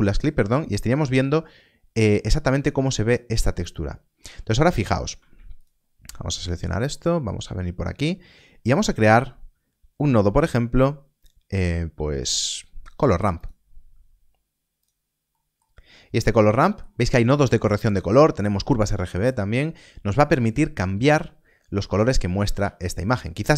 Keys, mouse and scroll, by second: 5.4 ctrl+s, 5.5 ctrl+shift+click, 6.1 scroll up 1, 6.9 middle click, 7.4-7.7 scroll up 1, 8.8 shift+a, 13.3 click, 15.3 middle click, 15.8 scroll up 1, 16.5 middle click, 22.9 ctrl+shift+click.